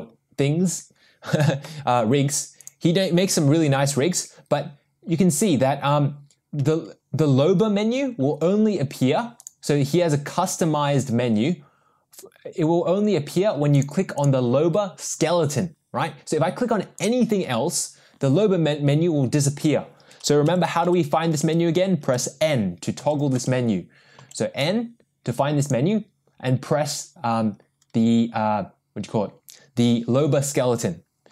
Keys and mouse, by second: 9.6 click, 13.7 click, 17.0 click, 20.7-23.4 typing, 24.5 n, 24.6 n.